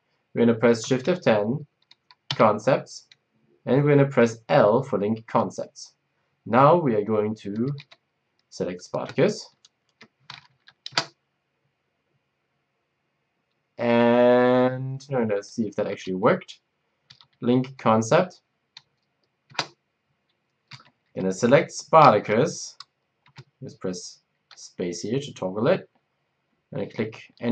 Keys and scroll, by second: 0.9 shift+F10, 2.3 c, 5.2 l, 7.2-9.7 typing, 10.4 Down, 10.9 Return, 14.7 shift+F10, 15.9 c, 17.0 c, 19.4 Down, 19.4 Return, 20.7-21.0 typing, 23.2 Down.